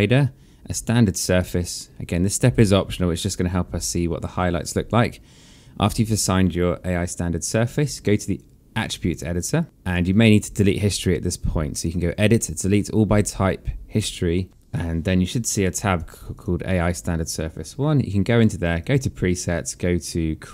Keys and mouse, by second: 1.0 click, 3.4 alt+middle click, 7.9 click, 11.8 click, 15.7 click, 18.6 click.